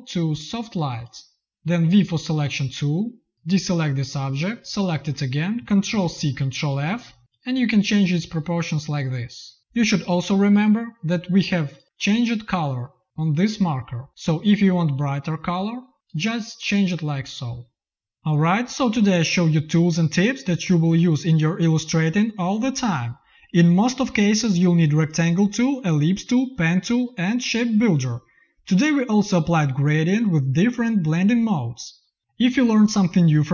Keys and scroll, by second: 2.3 v, 5.8 ctrl+c, 6.5 ctrl+f.